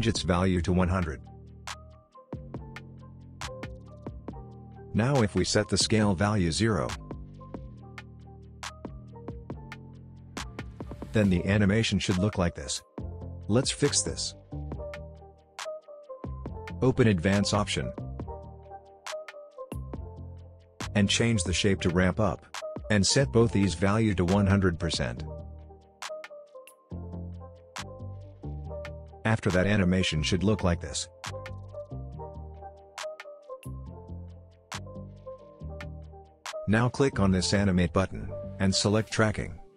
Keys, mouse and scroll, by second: 0.5-1.4 drag, 9.9 Return, 11.6-13.8 drag, 13.6 space, 17.4-20.4 drag, 28.8 space, 31.6-32.2 click, 32.2 space, 36.0-39.7 drag.